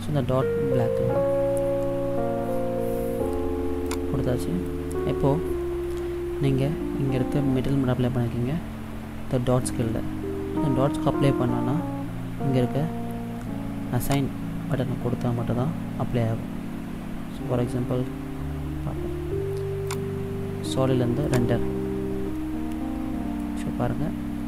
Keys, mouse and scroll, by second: 4.0 click, 14.2 click, 15.9 click, 20.0 click, 22.7 middle click.